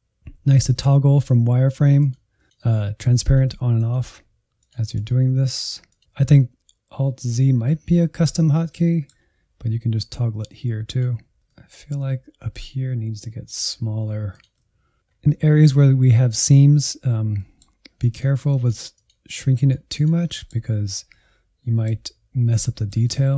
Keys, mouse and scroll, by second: 0.3 alt+z, 2.0-5.1 drag, 5.1 shift+middle click, 5.5 click, 5.7 middle click, 5.8 click, 6.0 middle click, 6.2 alt+z, 7.8 alt+z, 8.4 alt+z, 8.7 middle click, 9.3 scroll up 1, 10.8 click, 11.5 middle click, 11.5 scroll up 2, 11.6 middle click, 11.7 alt+z, 11.9 shift+middle click, 12.4 f, 12.6 middle click, 12.8 click, 13.3 middle click, 13.4 click, 13.5 middle click, 13.7 click, 13.8 middle click, 13.9 click, 14.1 alt+z, 14.2 click, 14.6 shift+middle click, 14.8-15.3 scroll up 3, 15.3-16.7 middle drag, 16.7-17.3 scroll down 3, 17.4 middle click, 18.0-20.3 drag, 20.3 middle click, 20.7-21.1 scroll up 2, 21.1-23.2 middle drag, 23.2 alt+z.